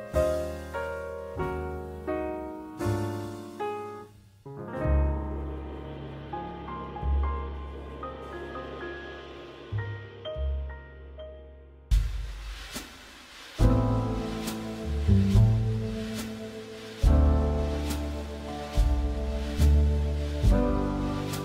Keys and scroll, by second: 1.4 Escape, 7.3 Escape, 10.0 Escape, 18.1 Escape.